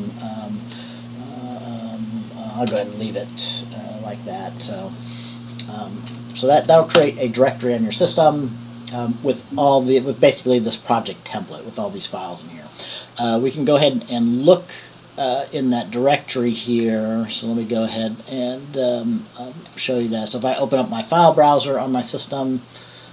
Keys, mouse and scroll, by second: 2.9 BackSpace, 7.2 Return, 16.4 click, 17.7 click, 19.9 click, 21.3 click.